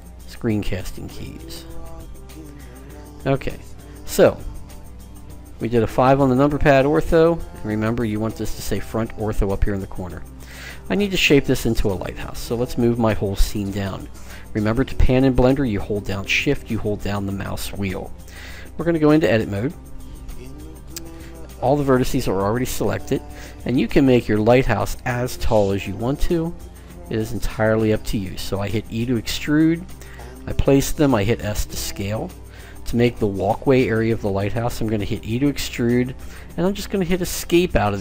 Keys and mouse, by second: 1.6 click, 3.2-4.3 middle drag, 5.7 KP_5, 6.7 KP_1, 7.2 KP_5, 20.6 click, 23.7 e, 29.9 s, 34.7 e.